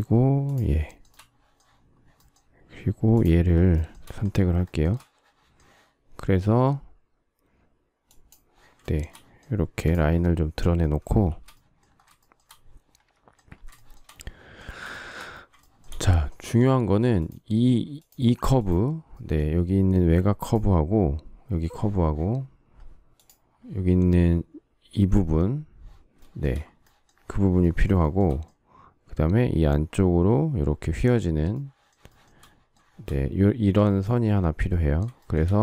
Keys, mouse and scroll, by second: 0.4 shift+click, 0.8 shift+middle click, 0.9 shift+double middle click, 1.0 shift+middle click, 3.1 shift+click, 3.4 shift+scroll, 3.6 shift+middle click, 4.6 shift+middle click, 4.9 shift+middle click, 8.7 shift+middle click, 11.2 shift+c, 12.1 shift+middle click, 13.7 shift+middle click, 14.9 shift+middle click, 27.9 shift+middle click, 32.1 shift+middle click, 35.1 shift+middle click.